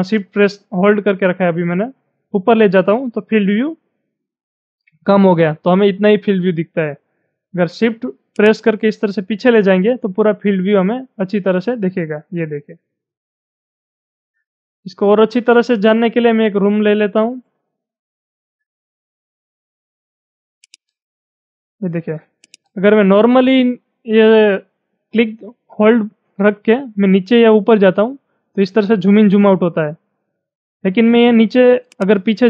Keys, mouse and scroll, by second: 8.4-14.5 shift+drag, 14.5-14.9 scroll up 3, 15.2-18.4 shift+middle drag, 18.4-20.8 shift+middle drag, 20.6 click, 20.8-32.4 drag.